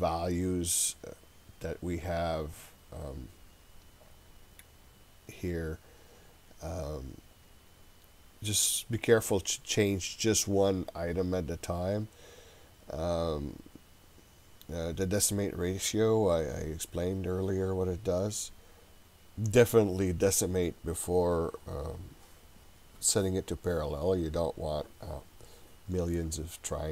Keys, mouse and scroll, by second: 5.1-6.3 scroll down 2, 6.3-6.9 scroll down 1, 6.9-10.9 scroll down 1.